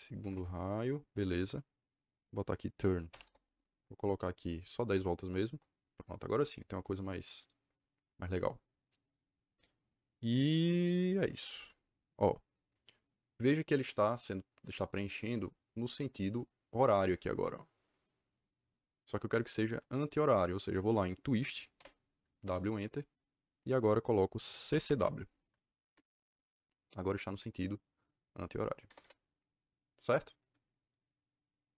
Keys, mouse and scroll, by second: 0.1 KP_5, 0.2 KP_Enter, 3.0 t, 3.1 Return, 4.7 KP_1, 4.8 KP_0, 5.4 KP_Enter, 21.7 w, 22.3 Return, 24.4-25.4 typing, 25.9 Return, 28.8 KP_Enter, 28.9 KP_Enter.